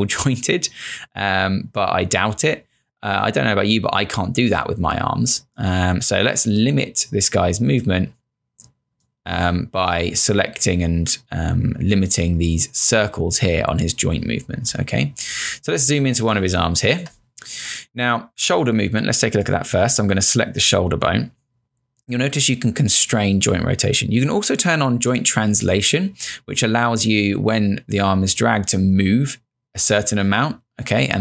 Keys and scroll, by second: 16.2 space.